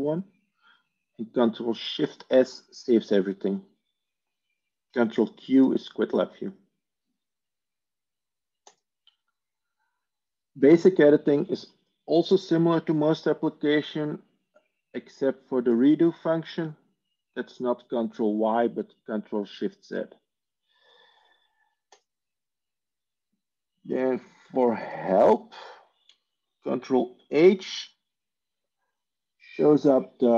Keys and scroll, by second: 24.2 Tab, 24.4 Tab, 26.7 ctrl+h.